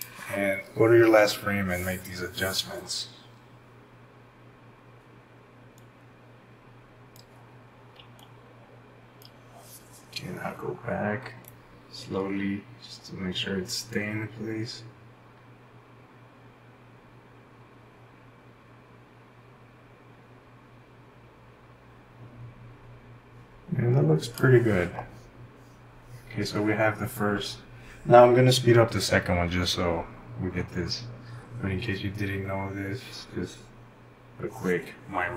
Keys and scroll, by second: 8.0-9.1 typing, 11.5 typing.